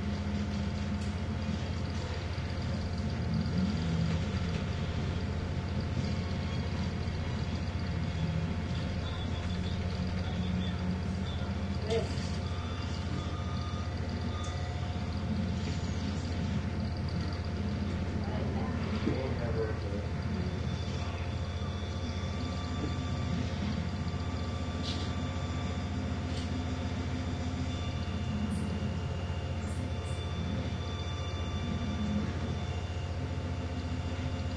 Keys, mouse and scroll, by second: 0.7 click, 2.1 click, 4.2 Up, 6.9-8.9 drag, 9.5 Up, 12.7 click, 15.0 click, 16.3 Down, 18.8 click, 20.1 click, 21.7 click, 27.0-28.3 scroll down 2, 28.5-28.9 scroll down 2, 29.4 click, 30.4 click, 31.9-32.3 ctrl+scroll down 1, 33.9 click.